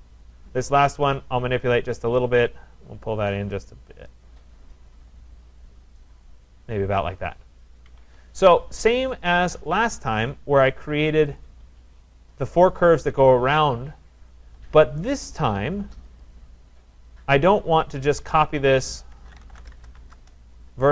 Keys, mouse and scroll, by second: 0.3 click, 2.5 click, 6.2 click, 6.8 click, 7.4-7.7 scroll, 7.9 Escape, 8.0 Escape, 9.2 click, 9.2 middle click, 9.4 click, 11.2 click, 11.4 click, 12.1 middle click, 12.3 middle click, 12.6-13.1 scroll, 16.2 click, 17.0 click, 18.6 click, 18.9-20.5 typing, 20.5 Return.